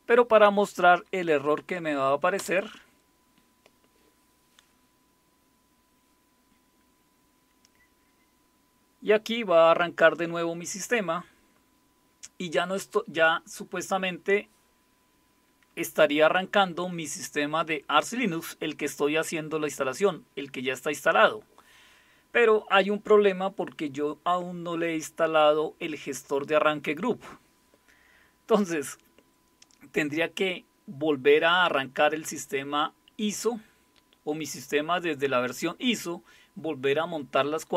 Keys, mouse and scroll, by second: 2.4 Return.